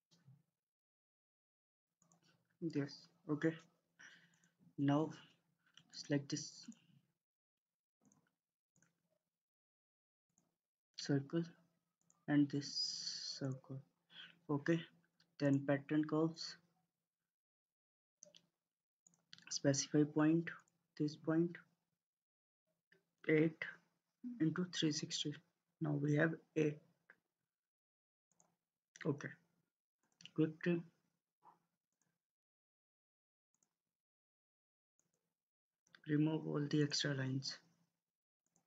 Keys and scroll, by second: 0.7 ctrl+z, 7.4 Escape, 8.8 Escape.